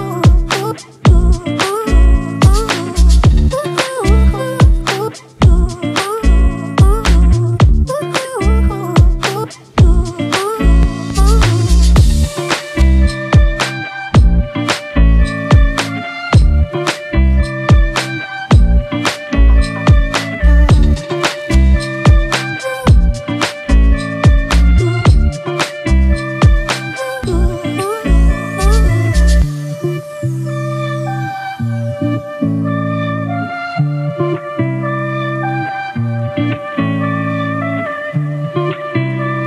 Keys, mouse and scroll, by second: 1.9 double click, 8.1 ctrl+z, 14.8 alt+click, 16.2 alt+click, 16.2 double click, 20.7-21.1 typing, 34.1-35.4 scroll up 1.